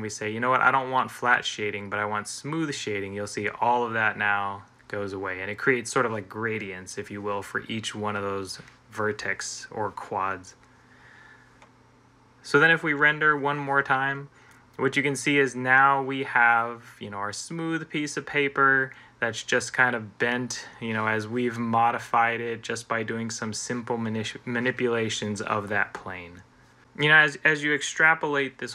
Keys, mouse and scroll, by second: 12.6 F12.